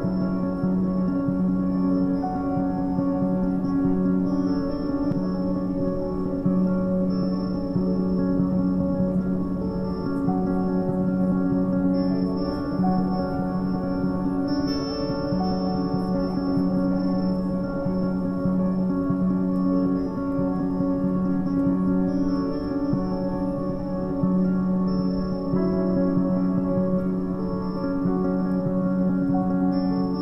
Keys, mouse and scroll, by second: 0.2 g, 2.4 Tab, 2.8 shift+middle click, 3.3-3.7 scroll up 2, 3.7 s, 7.2 ctrl+a, 8.5 ctrl+a, 9.6 a, 9.8 a, 10.4 shift+middle click, 11.3-11.6 scroll up 2, 11.6 shift+middle click, 12.0 scroll up 2, 12.3 click, 12.6 Tab, 13.3 a, 13.4 a, 14.4 Tab, 15.0 KP_1, 15.5 shift+d, 16.4 g, 18.0 Tab, 19.2 3, 19.4 click, 19.5 click, 20.2 alt+s, 23.0 a, 23.2 a, 23.6 shift+middle click, 24.2 Tab, 27.0-27.8 drag, 27.8 Tab, 28.7 ctrl+z, 29.1 ctrl+z.